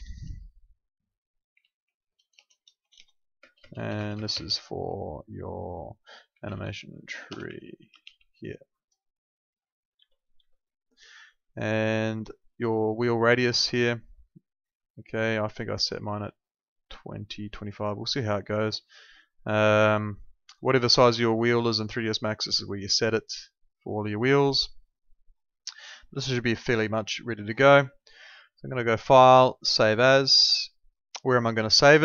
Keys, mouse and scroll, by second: 10.3 Escape, 13.1 click, 21.2 click, 28.9 click.